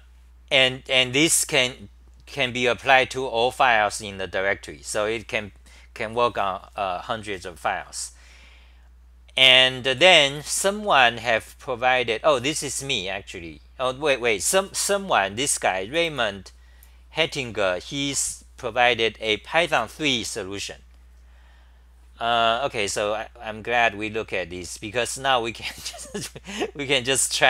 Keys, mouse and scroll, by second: 4.7-8.2 scroll down 10, 4.7 typing, 20.8-21.5 typing.